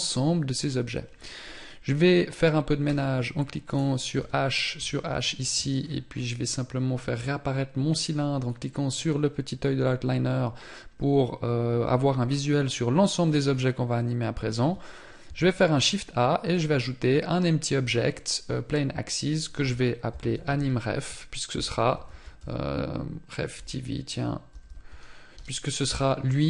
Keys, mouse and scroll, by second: 2.2 h, 8.3-8.7 scroll up 5.